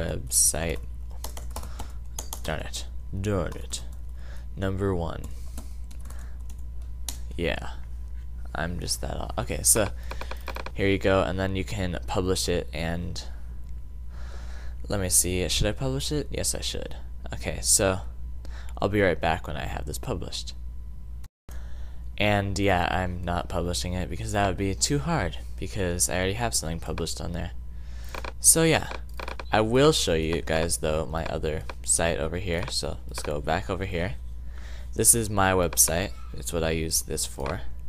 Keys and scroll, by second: 0.0-2.0 typing, 3.4-6.6 typing, 7.6 typing.